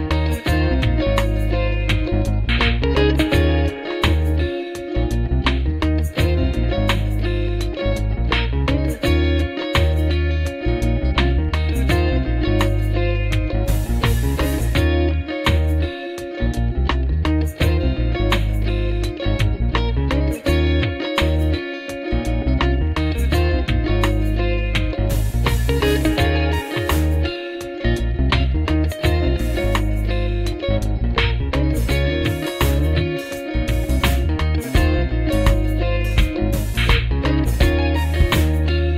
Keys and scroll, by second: 14.5 F4, 16.4 F4, 18.8 F4, 20.3 F4, 22.6 F4, 23.5 F4, 29.3 F3, 29.9 w, 30.4 F3, 38.0 F4.